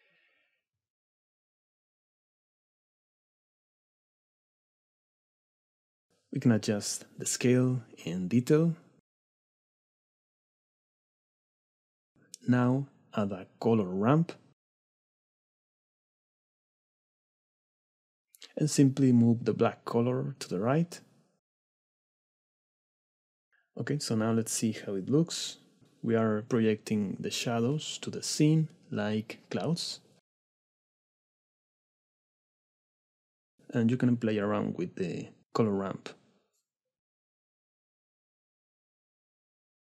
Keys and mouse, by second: 6.8-8.0 drag, 8.4 click, 9.8-11.0 drag, 11.4 click, 13.4 shift+a, 19.0-20.0 drag, 20.6 click, 21.2-21.8 drag, 22.0 shift+click, 23.5 KP_Divide, 23.5 click, 24.7-25.3 middle drag, 25.5 s, 27.3 shift+click, 27.6 click, 28.1 s, 29.4 click, 29.6 click, 30.1 right click, 30.8 click, 31.5 s, 32.1 click, 33.8 click, 35.8 click, 38.4-39.8 drag.